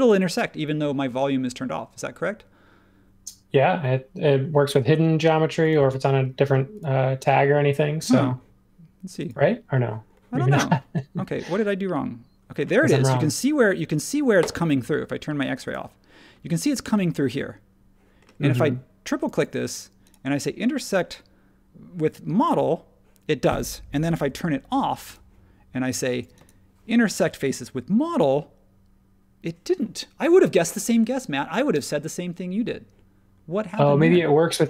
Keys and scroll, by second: 24.1 super+z.